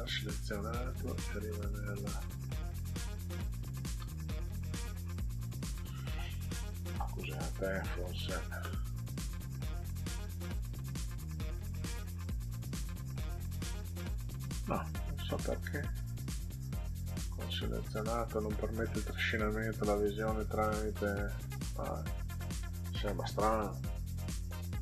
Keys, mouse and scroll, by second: 1.3 click, 1.8 click, 4.0 Down, 4.6 Down, 5.5 Down, 8.8 click, 9.5 click, 10.2 click, 11.7 click, 12.8 click, 14.5 click, 14.7 click, 15.9-17.3 drag, 18.6 click, 20.2 click, 22.1 click, 22.7 click, 23.9 Down.